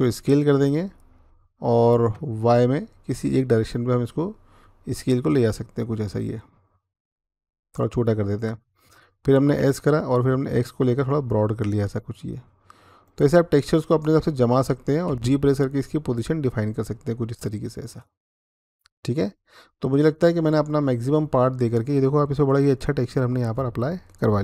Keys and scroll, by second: 0.0 s, 1.9 y, 9.4-10.1 typing, 14.9 g.